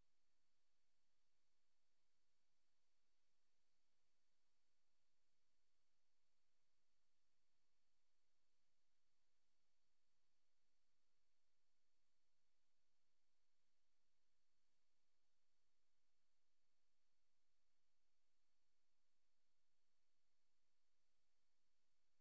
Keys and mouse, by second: 0.9 click, 1.3 click, 1.9 click, 2.3 click, 2.8 click, 3.7 click, 4.4 click, 7.8 click, 8.7 click, 9.8 click, 11.1 click, 11.6 click, 11.8 click, 12.2 click, 12.4 click, 12.6 click, 14.1 click, 15.5 click, 20.2 click.